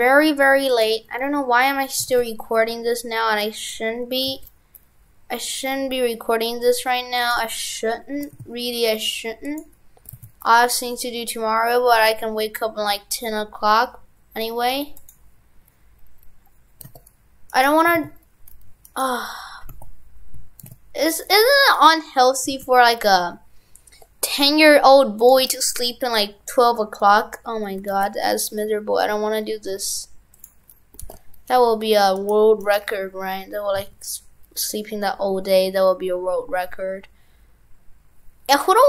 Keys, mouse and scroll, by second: 19.0 right click.